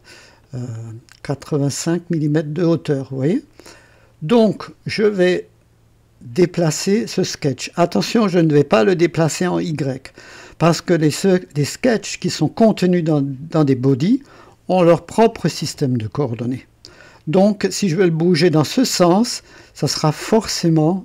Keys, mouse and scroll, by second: 0.4 click, 3.9 click.